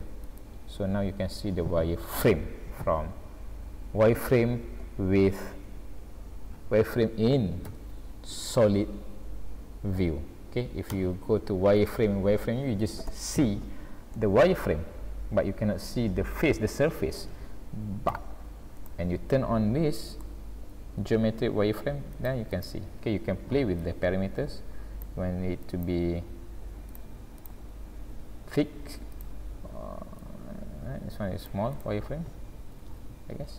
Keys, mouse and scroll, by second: 8.8 scroll up 2, 9.6-10.2 scroll up 2, 10.9 z, 14.2 middle click, 18.1 z, 20.1 click, 27.4 click, 29.2 click, 31.7 click, 32.9 alt+a.